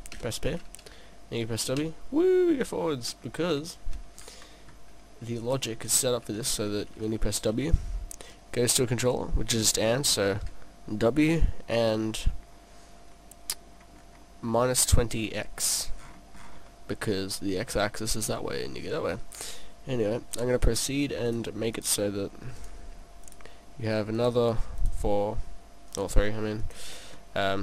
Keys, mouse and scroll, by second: 0.5 p, 5.4 right click, 5.9 right click, 12.2 scroll up 2, 13.1 scroll up 4, 14.6 middle click, 14.6-14.9 scroll up 3, 16.0-17.0 scroll down 7, 16.7 middle click, 20.3 click, 21.3 click, 21.8 click, 23.2 click, 24.8 click.